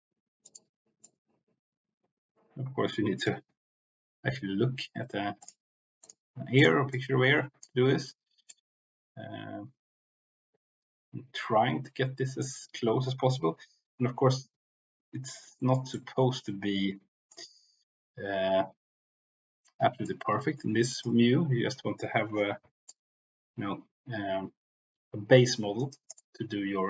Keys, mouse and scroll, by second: 0.3 click, 0.9-3.2 drag, 5.3 click, 6.0 click, 6.9 click, 8.5-12.4 drag, 15.3 middle click, 15.9-17.2 middle drag, 20.0 click, 22.8-26.0 drag, 25.7 right click, 26.2-26.8 drag.